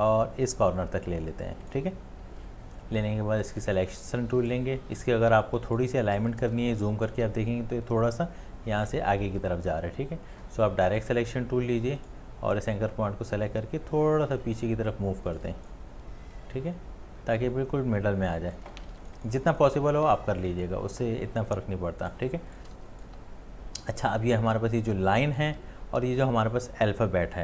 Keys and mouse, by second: 5.3 space, 5.9 ctrl+space, 6.7 click, 6.9 click, 7.1 ctrl+space, 18.8 space, 19.4 ctrl+alt+space, 19.4 click, 19.5 click, 19.6 ctrl+alt+space, 19.7 click, 19.8 alt+c, 20.2 click, 20.6 click, 20.6 click, 20.7 space.